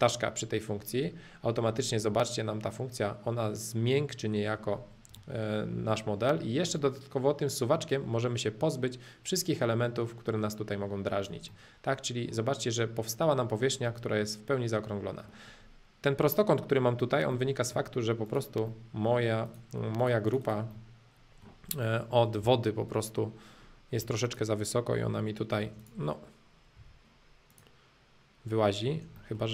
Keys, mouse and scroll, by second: 0.0-1.4 drag, 1.4 middle click, 2.1-4.7 middle drag, 5.2-7.2 middle drag, 7.9-9.9 drag, 11.5-13.5 middle drag, 13.9-15.9 middle drag, 17.3-18.3 middle drag, 18.3 click, 18.7 middle click, 19.4-20.7 drag, 20.7-22.4 middle drag, 22.4 j, 24.0 p, 24.2-25.6 drag, 25.6 space, 25.8-26.8 drag, 26.8 m, 27.5-28.8 drag, 28.8 space, 29.2-29.5 middle drag.